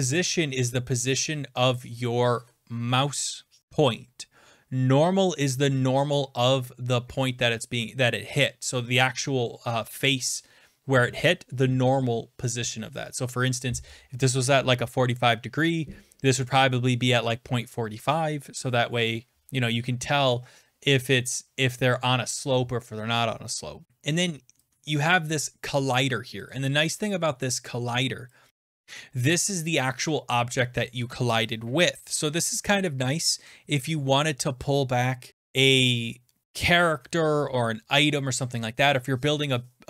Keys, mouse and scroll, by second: 25.5 click, 26.5 click, 28.5 scroll down 6, 31.2 scroll.